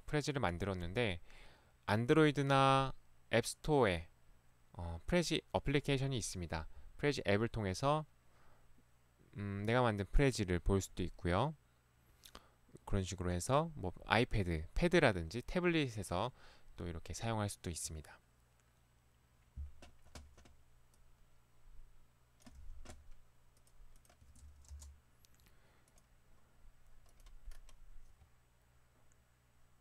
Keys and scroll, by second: 22.6 ctrl+c, 24.3 ctrl+v, 24.8 Return.